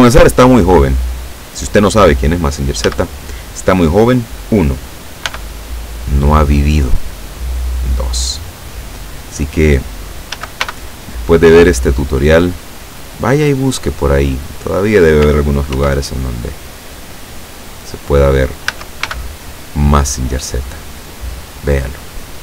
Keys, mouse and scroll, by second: 0.6 click, 1.3 click, 2.1-2.5 scroll up 2, 2.9 a, 5.3 b, 5.6-6.8 drag, 7.6-9.4 drag, 10.4 a, 10.7 b, 11.1 click, 12.3-13.8 drag, 15.8 ctrl+r, 16.4 click, 18.0 click, 18.8 a, 19.1 b, 19.6 click, 21.0-22.4 drag.